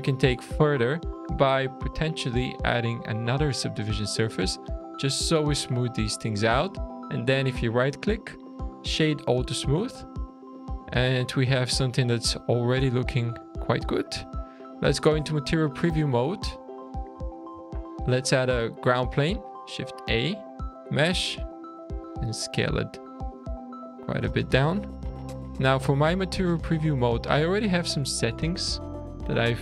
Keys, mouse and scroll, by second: 1.7 click, 4.7-5.0 scroll down 3, 5.2 shift+middle click, 6.7-7.4 scroll down 1, 7.4 right click, 9.7-10.4 scroll up 8, 10.4-11.3 scroll down 7, 11.7 shift+middle click, 13.2-14.5 shift+scroll down 1, 14.5 click, 15.6 scroll down 3, 16.2-16.6 scroll up 4, 16.7-17.2 scroll down 2, 17.3 shift+a, 19.7-20.5 scroll down 3, 21.0 s, 21.9 s, 23.6 click, 24.5 s, 25.5-26.0 scroll up 1, 26.0-26.8 scroll up 1, 27.1 click.